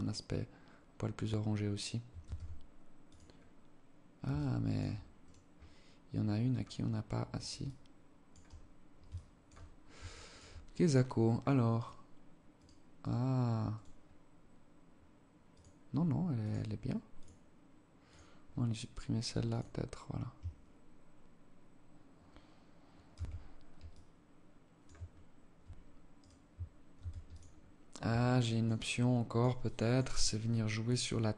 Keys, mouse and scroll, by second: 1.5 ctrl+s, 3.6 alt+click, 4.5 right click, 6.0-6.6 scroll up 5, 6.6-6.9 scroll down 1, 6.9 alt+click, 7.8-8.2 scroll up 2, 8.4 alt+shift+click, 8.8 scroll up 2, 9.3 alt+shift+click, 10.6 scroll down 1, 11.0 right click, 11.8 right click, 12.4 right click, 13.0 right click, 14.8 click, 16.5 click, 17.4 click, 18.8 click, 22.4 shift+c, 22.7 scroll down 3, 23.2 alt+click, 24.4-24.7 alt+shift+scroll up 4, 25.5 right click, 26.2 ctrl+s, 26.8-27.2 scroll up 4, 27.4 alt+click, 28.0 alt+click, 29.0 alt+click, 30.9-31.3 scroll down 15.